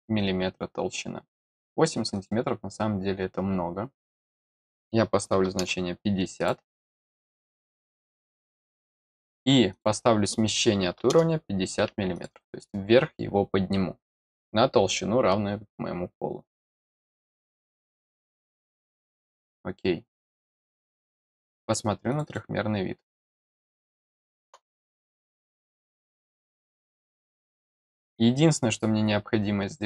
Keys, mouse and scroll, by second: 2.1 click, 3.9 click, 6.3 click, 7.5 click, 9.7 click, 12.1 click, 17.5 click, 19.2 click, 22.0 click, 22.2 click, 23.8 middle click, 26.5 click, 27.6 click, 28.9-29.3 scroll up 1, 29.3 scroll down 1.